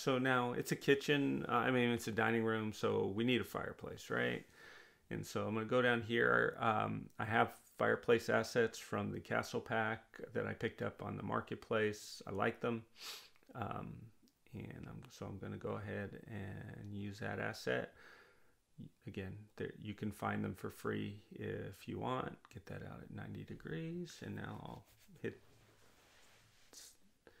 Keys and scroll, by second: 22.6-23.9 typing.